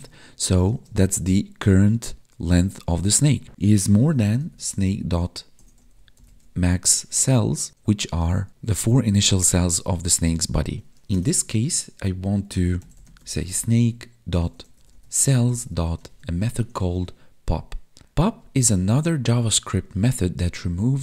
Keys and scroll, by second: 0.2 space, 0.6 space, 7.7 Tab.